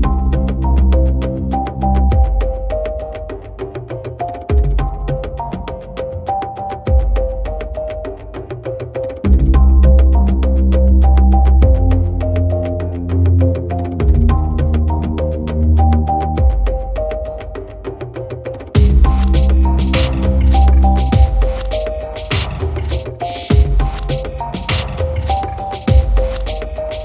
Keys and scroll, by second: 0.9 ctrl+alt+z, 3.7 ctrl+0.